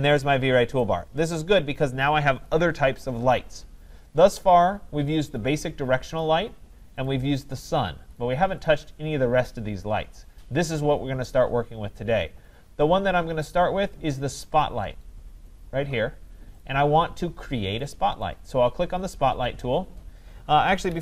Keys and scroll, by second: 20.9 Escape.